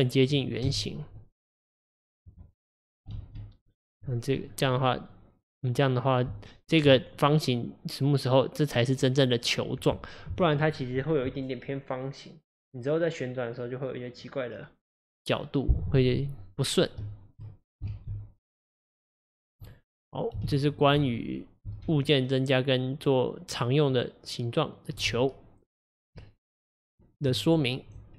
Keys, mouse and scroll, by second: 0.0 click, 0.8 KP_1, 1.6 click, 3.2 ctrl+alt+s, 4.5 click, 4.8-10.3 middle drag, 17.1 shift+middle click, 18.0 alt+z, 18.9 middle click, 19.8 click, 20.6 alt+z, 21.9-25.0 alt+z, 26.3 Tab.